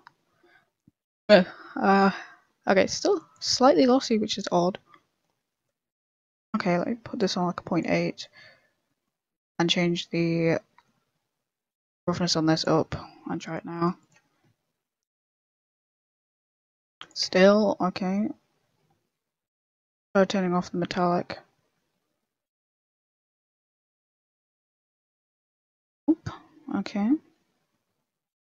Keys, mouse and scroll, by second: 6.6 middle click, 7.1 click, 8.0 middle click, 8.8 middle click, 9.6 middle click, 10.2 middle click, 12.2 middle click, 12.2 click, 13.5 click, 14.2 click, 19.6 click, 23.2 click, 26.8 click.